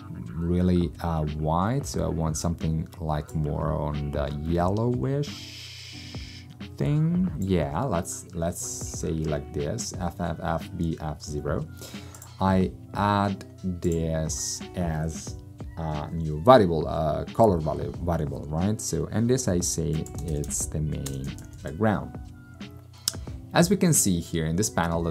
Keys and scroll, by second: 19.9-22.1 typing.